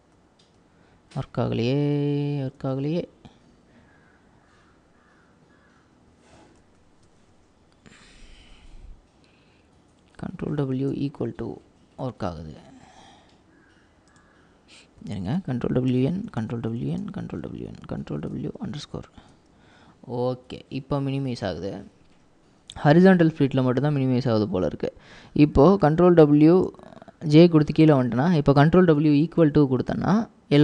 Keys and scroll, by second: 1.6 ctrl+w, 6.1 ctrl+w, 10.5 ctrl+w, 10.9 =, 15.5 ctrl+w, 16.0 n, 16.3 ctrl+w, 16.9 ctrl+w, 26.0 ctrl+w, 26.7 j, 28.9 ctrl+w, 29.5 =.